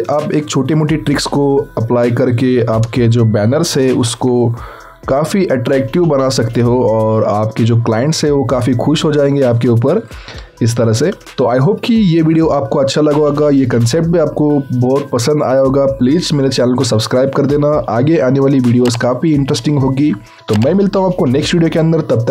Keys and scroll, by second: 3.8 ctrl+t.